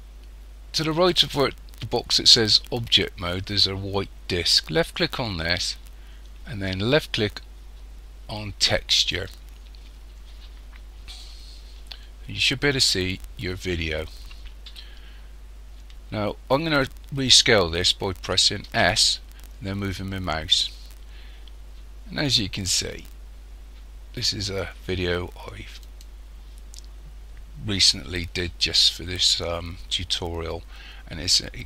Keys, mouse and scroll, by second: 5.0 click, 18.7 s.